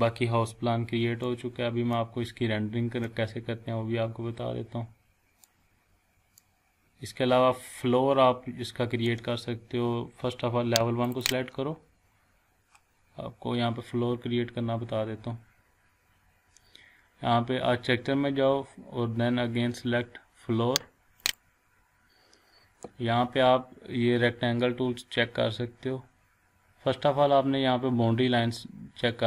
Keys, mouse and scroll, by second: 1.2 scroll up 2, 1.2-2.2 middle click, 3.1-5.5 shift+middle drag, 11.0 click, 12.4 scroll down 2, 15.3 scroll up 1, 16.2-17.8 scroll down 1, 21.2 click.